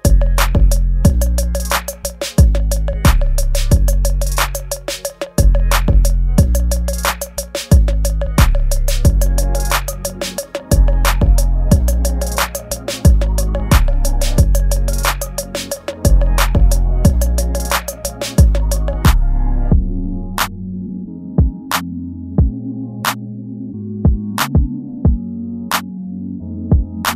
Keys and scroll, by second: 1.7 space, 2.9 space, 4.1 space, 5.5 space, 8.5 space, 10.0 space, 11.3 space, 11.7 space, 14.4 space, 16.4 ctrl+z, 16.7 space, 17.5 space, 18.5 space, 20.1 space, 22.3 space, 25.6 ctrl+g.